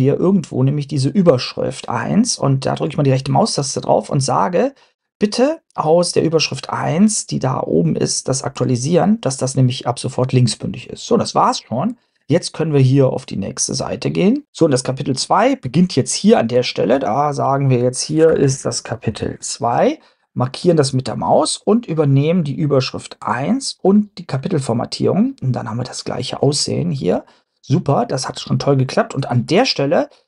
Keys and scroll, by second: 15.7 Return, 16.2 Return, 16.5 Up, 16.9 Down, 17.4 Up, 18.1-19.9 typing.